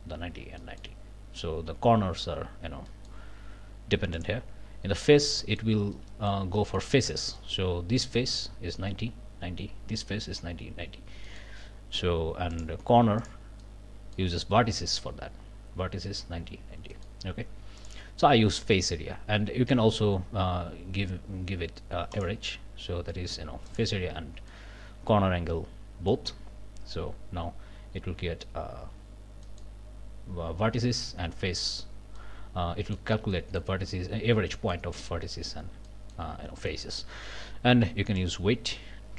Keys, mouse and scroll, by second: 0.6 click, 2.9 click, 4.1 click, 5.0 click, 5.4 click, 5.9 middle click, 6.3 scroll up 1, 6.6 middle click, 7.4 middle click, 11.2 middle click, 12.5 click, 13.2 click, 13.6 click, 16.9 click, 17.8 click, 22.1 click, 23.7 click, 24.5-26.3 drag, 29.4 click, 32.2 click, 33.3 click, 34.5 click, 35.9 click, 36.7 click, 37.0 scroll down 1, 38.2-39.1 drag.